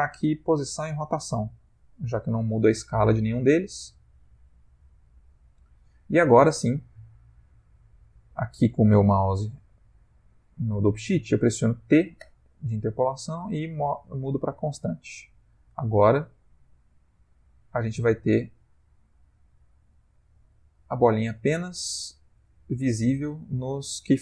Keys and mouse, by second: 4.5 click, 12.2 t, 15.5 click.